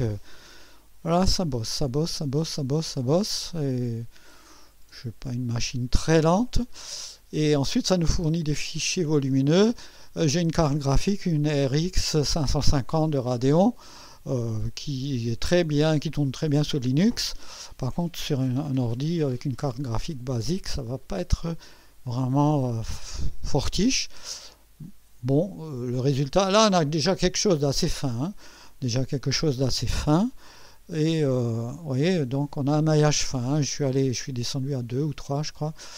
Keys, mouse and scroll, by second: 19.3 right click, 20.6-22.6 drag, 24.8-26.8 drag, 27.6-28.4 right drag, 30.6 click, 31.9 click.